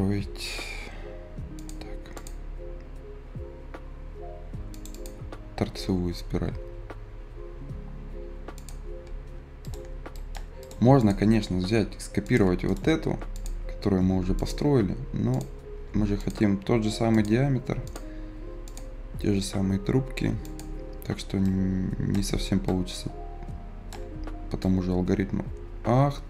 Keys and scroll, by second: 0.8 s, 18.7 Escape.